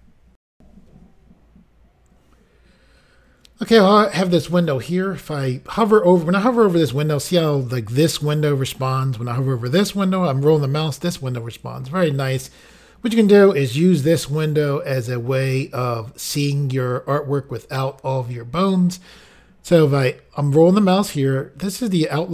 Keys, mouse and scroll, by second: 0.5 Insert, 4.6-5.2 scroll up 1, 5.2-5.8 scroll up 1, 7.8 scroll down 2, 8.2 scroll up 2, 9.6 scroll down 2, 10.0 scroll up 1, 11.0 scroll up 1, 19.7-20.6 scroll down 2, 20.6-20.9 scroll down 1.